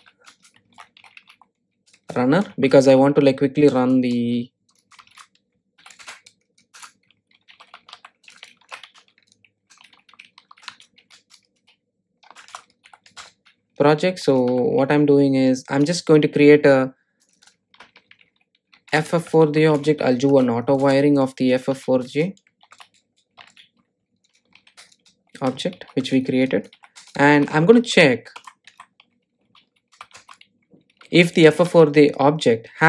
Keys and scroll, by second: 9.9 Return, 21.0 Return, 30.5 Tab, 32.1 Return.